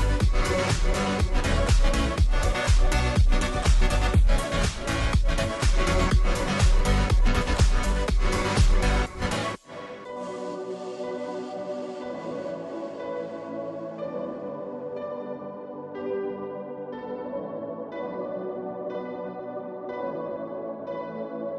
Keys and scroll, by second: 8.0-9.1 space, 19.8-20.7 space, 21.4 space.